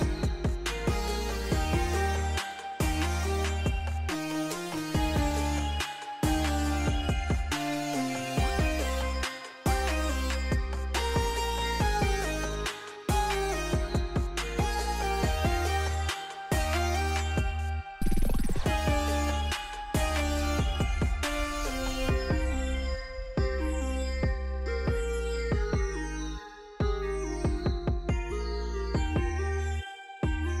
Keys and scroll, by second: 2.7 p, 4.6 r, 7.3 d, 8.2 4, 8.4 Return, 9.1 Escape, 10.8 d, 12.2 1, 12.4 Return, 14.0 e, 19.9 e, 23.6 2.